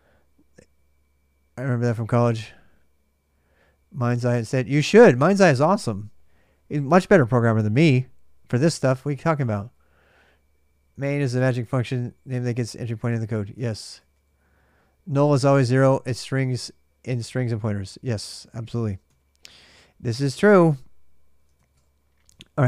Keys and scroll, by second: 8.7-9.9 typing, 13.4 ctrl+[, 13.6-14.8 typing, 17.9 ctrl+[, 18.0-18.8 typing, 19.5 ctrl+a, 19.7 ctrl+a, 22.1-22.6 typing.